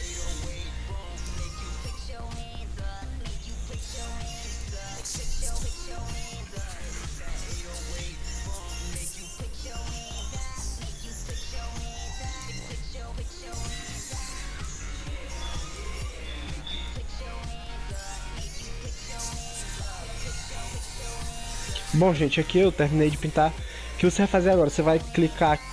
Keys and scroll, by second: 0.4 ctrl+z, 5.4 ctrl+-, 24.0 ctrl+0.